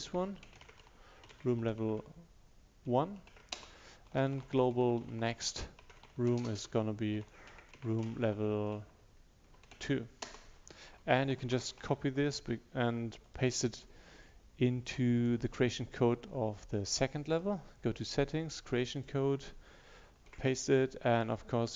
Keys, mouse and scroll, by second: 0.0-1.3 typing, 2.9 1, 4.1-9.5 typing, 10.3 Return, 11.0 Up, 13.3 click, 21.2 click.